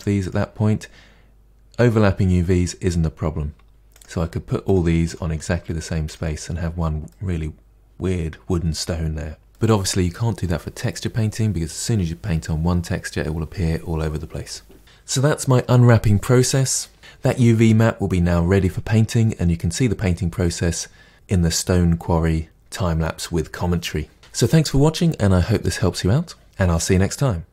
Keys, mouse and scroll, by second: 3.9 click, 4.1 g, 5.0 click, 5.2 g, 6.6-7.0 scroll down 1, 7.0-8.8 middle drag, 8.8-9.4 scroll down 2, 9.4-14.8 middle drag, 14.8 click.